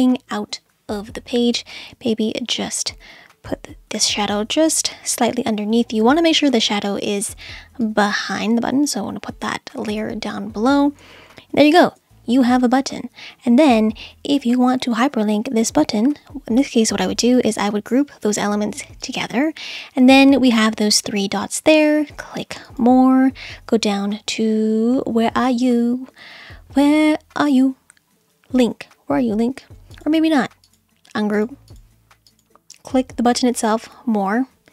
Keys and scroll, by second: 3.9 Up.